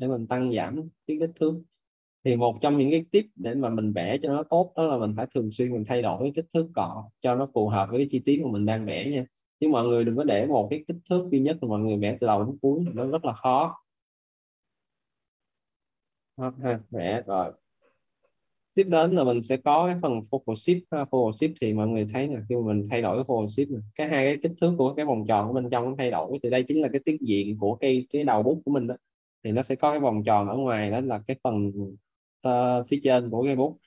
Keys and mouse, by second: 8.1 click, 13.3 right click, 13.8 alt+click, 16.0 shift+click, 16.5 right click, 16.9 alt+right click, 22.6 click, 29.1 alt+`.